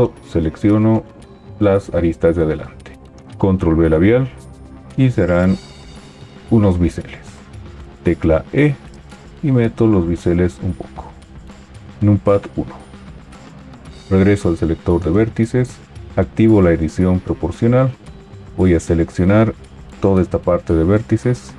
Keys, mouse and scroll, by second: 3.2 ctrl+b, 7.8 e, 12.0 KP_1.